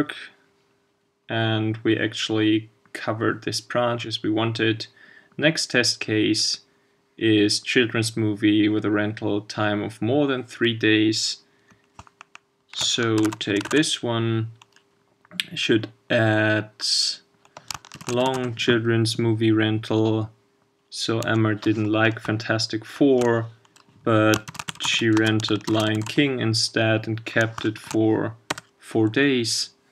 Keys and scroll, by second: 13.2 shift+super+c, 13.7 super+v.